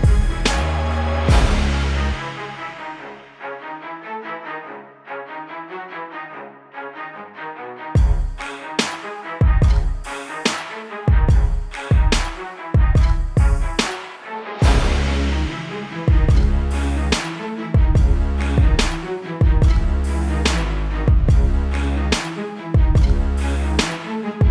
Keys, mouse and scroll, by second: 0.0 BackSpace, 0.5 click, 1.0 click, 1.4 ctrl+shift+], 1.8 ctrl+t, 2.3 ctrl+shift+click, 3.6 alt+shift+click, 4.7 click, 5.6 KP_Enter, 5.8 click, 7.0 ctrl+t, 8.3 KP_Enter, 8.5 Down, 8.9 click, 9.4 Down, 10.0 click, 10.6 Down, 11.4 click, 14.0 click, 23.0 click, 24.2 click.